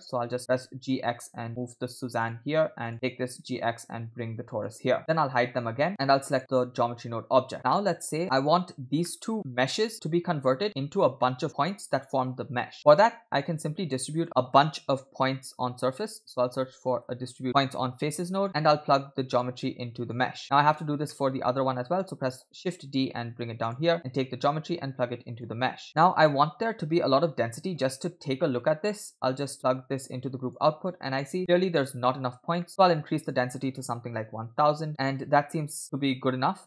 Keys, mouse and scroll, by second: 0.4 g, 2.9 click, 3.1 g, 5.0 shift+middle click, 5.0 scroll up 2, 6.4 click, 7.7 middle click, 8.2 click, 8.2-8.6 scroll up 2, 9.1 middle click, 9.6 click, 12.8 scroll down 2, 12.8 middle click, 13.2-13.5 scroll up 2, 13.6 shift+a, 19.4-20.2 drag, 20.4 click, 21.1 middle click, 22.4 shift+d, 24.5-25.4 drag, 27.5 middle click, 28.0-28.5 scroll down 3, 28.6 middle click, 29.5-30.6 drag, 31.3-32.6 scroll up 3, 31.4 shift+middle click, 32.6-33.3 scroll up 2, 32.6 middle click, 33.3 scroll up 1, 33.4-34.9 drag, 34.5 0, 35.1-35.6 scroll up 2, 35.8-36.6 drag.